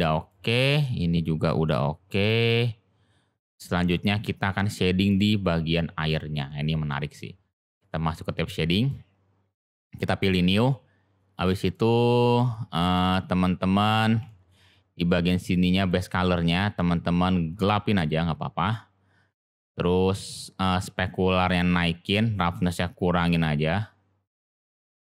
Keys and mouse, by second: 0.1 click, 3.5-3.9 middle drag, 5.0 click.